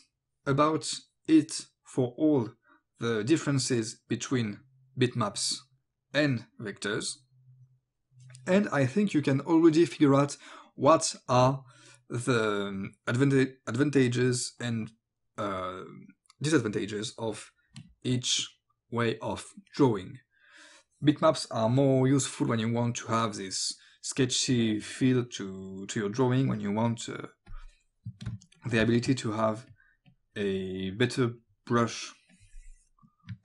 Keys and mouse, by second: 25.3 click, 27.5 click, 28.3 space, 28.6 click, 28.7 space, 28.9 click, 29.7 click, 31.7 click.